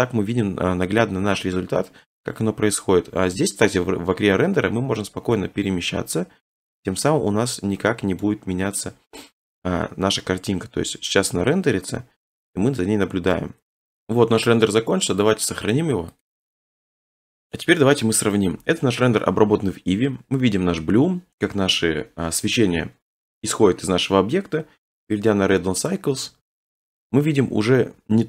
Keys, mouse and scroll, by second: 3.0-3.6 scroll, 4.5-4.9 scroll, 5.6-6.1 scroll, 6.9 middle click, 7.0 middle click, 7.4 middle click, 8.2 middle click, 8.3 middle click, 8.5 middle click, 9.3 middle click, 9.4 middle click, 9.8 middle click, 9.9 middle click, 10.0-10.3 middle click, 10.2 middle click, 10.2 middle click, 10.3 scroll, 11.7 scroll, 11.9 middle click, 13.3 middle click, 13.6 middle click, 13.6 middle click, 13.7 middle click, 15.2 click, 16.2 click, 16.9 typing, 17.2 click, 17.3 click, 17.5 click, 26.2 Right.